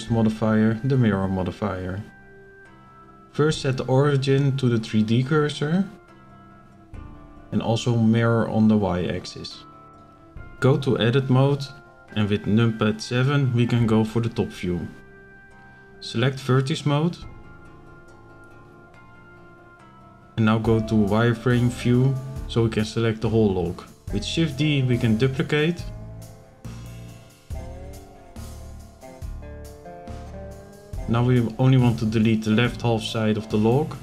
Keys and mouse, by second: 2.2-4.5 drag, 6.0-6.5 shift+middle drag, 7.5 click, 8.9 click, 10.2 shift+middle click, 11.3 shift+middle click, 12.5 KP_7, 15.1 click, 18.9 b, 20.6 right click, 21.1 z, 21.9 click, 22.8 b, 24.4 shift+d, 26.0 click, 29.4 click, 31.6 b.